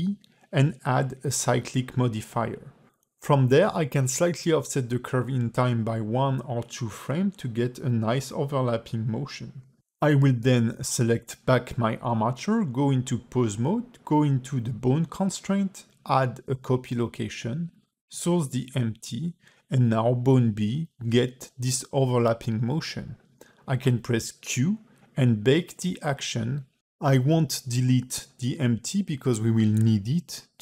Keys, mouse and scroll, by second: 0.3 click, 1.0 a, 1.7 shift+e, 3.6 scroll down 2, 4.6 click, 5.0 space, 6.1 g, 11.3 space, 12.3 click, 13.0 ctrl+Tab, 13.3 click, 14.4 click, 15.1 click, 15.4 click, 17.5 click, 19.9 space, 21.8 q, 24.2 click, 24.6 click, 25.1 click, 25.6 click, 26.3 ctrl+Tab, 26.5 click, 27.1 click, 27.6 space, 28.5 space, 29.0 ctrl+Tab, 29.2 click, 29.7 click, 30.2 click, 30.5 ctrl+Tab.